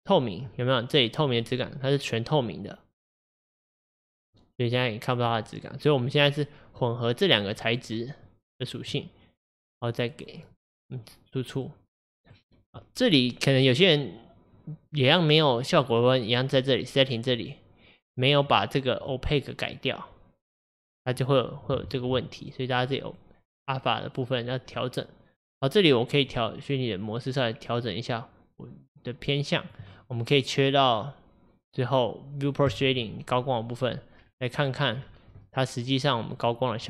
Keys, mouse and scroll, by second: 1.5-4.5 middle drag, 6.8-7.5 drag, 8.8 click, 9.7-10.5 drag, 11.7-17.3 middle drag, 17.3 click, 19.1-21.9 drag, 21.9 ctrl+z, 22.8 click, 24.8-26.4 middle drag, 26.4-29.3 drag, 32.7 click, 33.5-34.2 middle drag, 34.2-34.7 scroll down 2, 35.5-36.5 middle drag, 36.5 click.